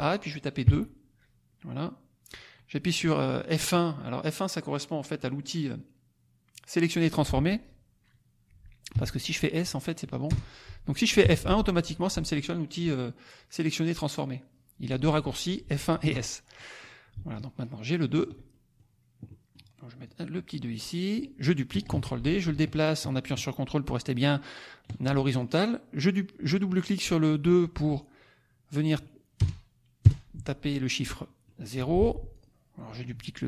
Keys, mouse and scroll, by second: 0.6 KP_2, 8.9 s, 10.3 BackSpace, 11.2 F1, 16.5 click, 17.3-18.3 ctrl+drag, 18.4 ctrl+middle click, 18.9 ctrl+scroll up 1, 19.2 click, 20.0-21.4 drag, 21.8 ctrl+d, 22.3-24.1 ctrl+drag, 25.2 ctrl+click, 29.4 BackSpace, 30.0 KP_0, 31.0 click, 31.7 F1, 32.3 click.